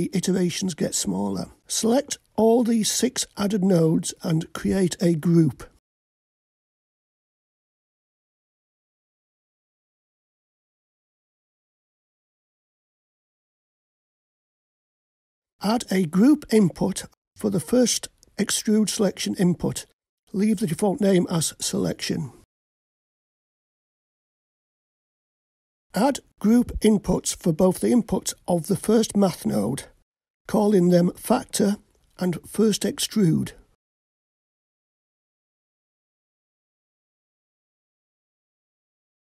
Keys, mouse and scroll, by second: 2.4-3.0 scroll down 1, 3.0-4.1 middle drag, 3.0 scroll down 2, 5.0-7.6 drag, 9.9-17.0 drag, 17.0-19.6 scroll up 5, 19.6-25.7 drag, 27.6-33.6 drag, 35.3-39.3 drag.